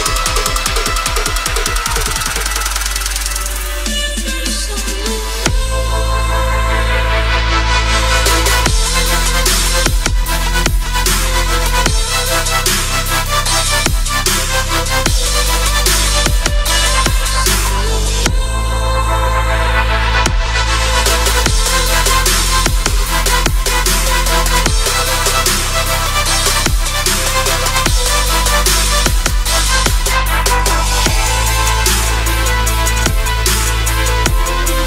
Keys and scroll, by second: 10.9 shift+F2, 11.2 Escape, 29.2-30.0 typing, 34.4 ctrl+shift+q.